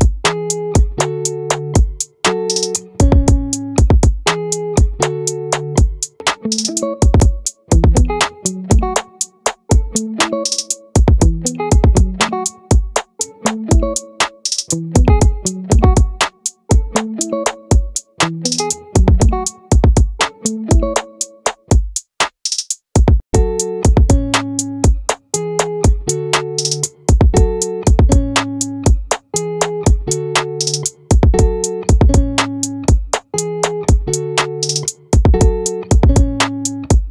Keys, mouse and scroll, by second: 4.1 Escape, 8.4 click, 10.1 ctrl+r, 29.8-31.6 drag, 31.6 scroll up 1.